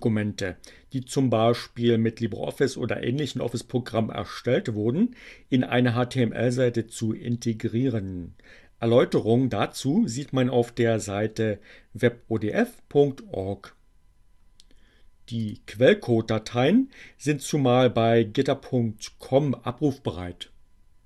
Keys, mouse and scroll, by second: 15.5 click.